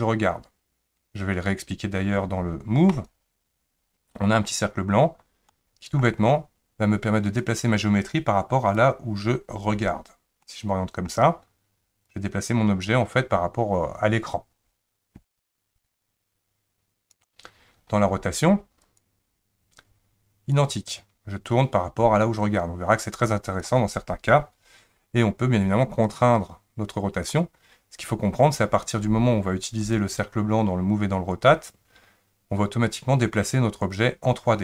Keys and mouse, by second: 3.0 click, 5.5-6.0 middle drag, 7.4 click, 10.4-11.1 middle drag, 12.2-17.2 drag, 18.8 click, 20.6-23.6 drag, 26.1-27.3 drag, 29.9 click.